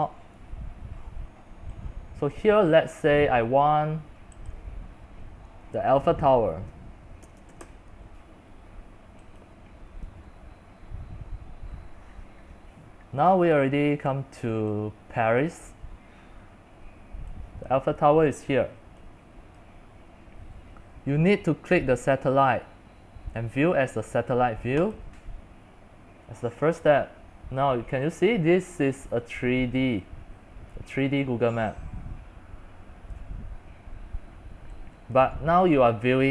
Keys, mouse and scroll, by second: 0.0-6.0 drag, 6.0-8.1 typing, 9.6-14.6 drag, 15.5 click, 16.3-17.8 scroll up 4, 17.8-24.8 drag, 25.1-30.1 drag, 30.2 click, 33.3 click, 33.7-36.3 middle drag, 33.9-34.2 scroll, 35.4-35.7 scroll.